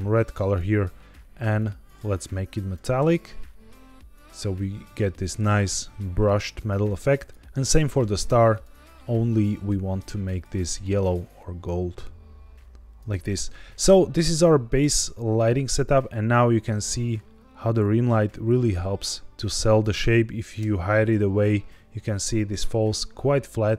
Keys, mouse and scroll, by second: 1.5-2.7 drag, 7.1 click, 7.4 ctrl+z, 7.6 click, 8.4 click, 9.9-10.3 drag, 10.8 click, 13.6-14.6 scroll up 2, 14.6-15.7 scroll down 2, 15.7 click, 16.1 r, 16.3 z, 19.7 click, 20.5 h.